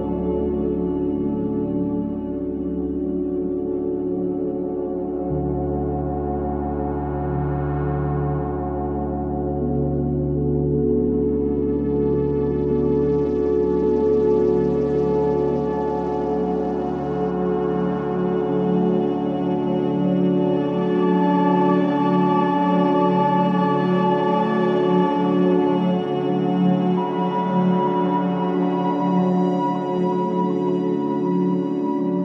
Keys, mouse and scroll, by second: 2.3 scroll down 1, 2.8 space, 2.9 click, 3.3 space, 5.0 click, 7.5-8.1 scroll up 1, 13.1-14.9 typing, 15.3 right click, 15.9 ], 16.2 right click, 16.8 click, 17.1-20.7 typing, 18.4 click, 18.9 click, 19.1 click, 20.0 click, 20.8-22.2 drag, 22.2 q, 22.6-26.2 drag, 26.3-28.9 typing, 26.7 scroll up 1, 27.9 click, 29.1 click, 29.1 click, 29.9 q, 30.5 click.